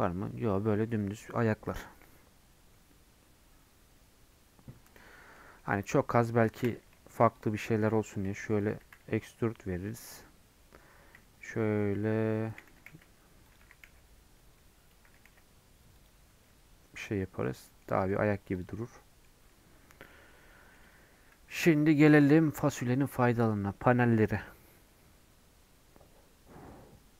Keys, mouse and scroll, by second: 0.2 Tab, 5.3 middle click, 5.6 scroll up 1, 5.9 middle click, 6.7 Tab, 7.4 alt+click, 7.9 g, 16.3 Tab, 16.6-17.0 scroll down 1, 17.0 click, 17.2 middle click, 17.8 scroll down 1, 18.0-19.9 middle drag, 19.9 scroll down 1, 20.1-27.1 middle drag.